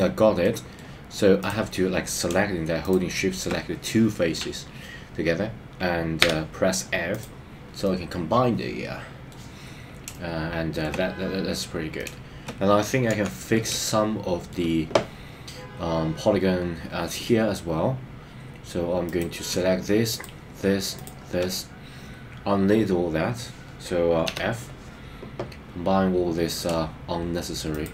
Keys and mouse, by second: 0.4 middle click, 6.3 f, 7.8-9.4 middle drag, 10.1 shift+middle click, 12.0 shift+middle click, 13.0 KP_3, 13.7 shift+middle click, 24.3 f, 27.7 shift+click.